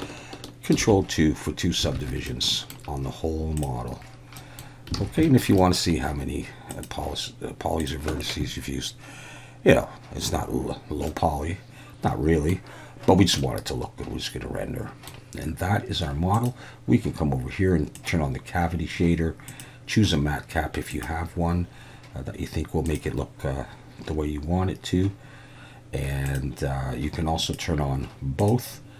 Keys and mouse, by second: 0.8 ctrl+2, 1.9 alt+a, 2.2-2.7 middle drag, 3.6 click, 4.4 middle drag, 5.2 shift+middle click, 5.6 middle click, 6.7-8.1 drag, 11.1-12.5 middle drag, 13.4-15.1 middle drag, 16.4-23.1 drag, 26.3-28.9 drag.